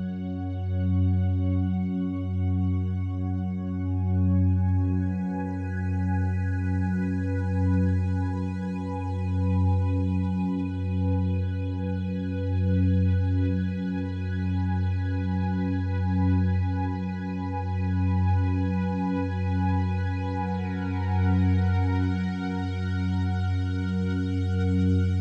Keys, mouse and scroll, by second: 2.8 x, 3.4 click, 4.5 2, 5.8 alt+shift+right click, 7.0 f, 8.0-12.1 drag, 15.5 click, 16.2 e, 18.4 click, 18.6 a, 18.9 a, 20.0-25.2 alt+drag.